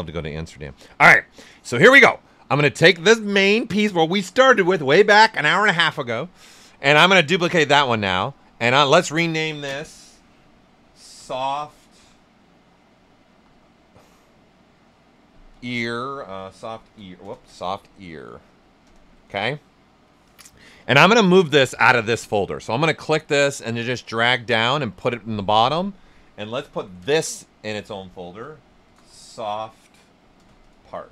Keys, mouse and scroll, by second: 0.5-6.6 right drag, 0.5 typing, 6.6 click, 7.5 click, 10.9-13.3 typing, 15.8-18.5 typing, 18.8 Return, 22.6-27.0 drag, 27.0 ctrl+f, 28.6-31.1 typing.